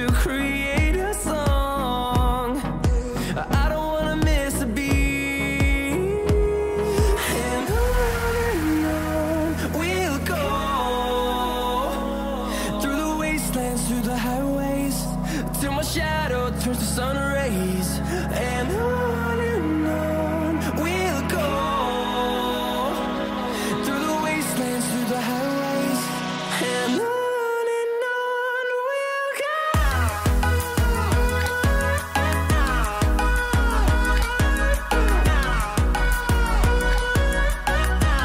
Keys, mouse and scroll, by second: 0.7 click, 1.5-2.0 scroll down 1, 2.0-2.9 scroll up 1, 2.9 click, 3.9-5.5 scroll down 1, 5.5 click, 9.1 scroll down 1, 10.7 click, 11.3 click, 11.7 scroll up 1, 13.3 click, 13.4-15.7 drag, 15.9-18.2 drag, 18.2 scroll up 1, 19.4 click, 20.2-20.8 scroll down 1, 20.8-25.1 drag, 25.1-25.8 scroll down 1, 25.8 click, 26.7-27.1 scroll down 1, 27.1 scroll, 27.2-28.1 scroll up 1, 28.1 click, 28.1 click, 28.7-29.7 scroll down 1, 30.1 scroll up 1, 31.3-35.9 drag, 35.9-36.3 scroll up 1, 36.3 click, 37.5-38.1 scroll down 1, 38.1-38.2 scroll up 1.